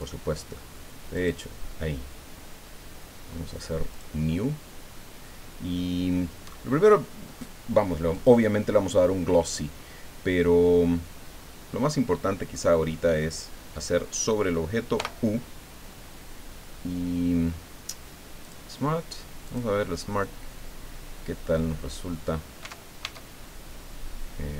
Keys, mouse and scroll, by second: 0.1 click, 1.1 click, 3.9 click, 8.1 click, 14.9 u, 18.4 click, 19.4 click, 21.0-21.7 scroll down 2, 22.6 Tab.